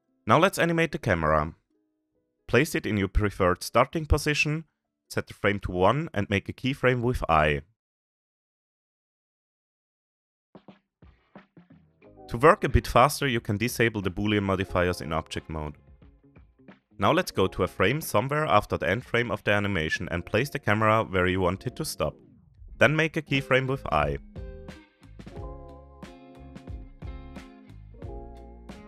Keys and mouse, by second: 1.0-1.3 shift+middle drag, 1.7 click, 4.2 click, 5.2-6.0 middle drag, 6.2-7.2 shift+middle drag, 8.7-11.3 shift+middle drag, 11.6 middle click, 14.1 click, 17.6 middle click, 18.7-19.2 middle drag, 19.8 shift+middle drag, 20.1-20.6 middle drag, 20.7 shift+middle drag, 20.9 shift+drag, 21.6-22.2 shift+middle drag, 22.3-22.6 middle drag, 22.7-23.6 shift+middle drag, 24.8-26.2 shift+middle drag, 26.6 middle click, 26.9 shift+middle click, 27.2-27.7 middle drag, 27.7 shift+middle click, 28.4 shift+middle click, 28.7 middle click.